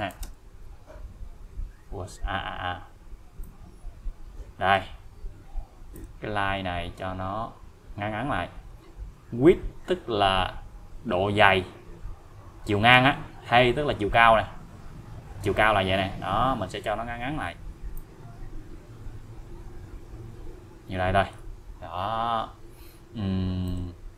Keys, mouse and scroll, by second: 0.0-0.7 typing, 3.4-5.0 click, 5.9 click, 18.0-21.4 click, 23.7 click.